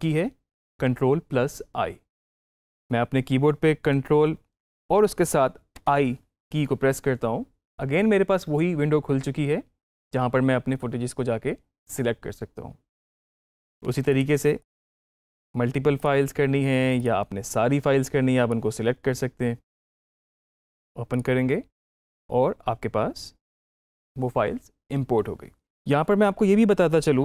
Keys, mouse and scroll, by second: 5.6 ctrl+i, 14.4 click, 14.6 ctrl+click, 16.9-19.5 drag.